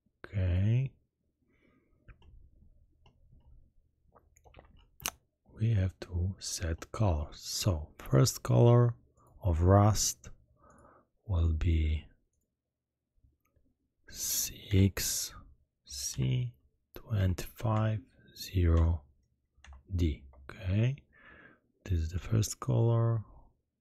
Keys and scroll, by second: 16.1 shift+c, 17.1 2, 17.7 5, 18.7 0, 19.6 shift+d, 20.1 Return.